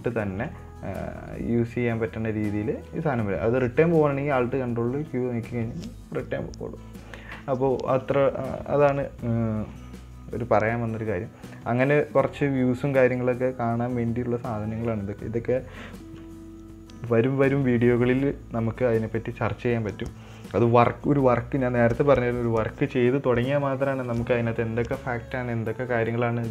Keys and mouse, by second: 5.0 ctrl+alt+q, 12.2-16.5 drag, 22.0-22.5 middle drag, 24.5 middle click.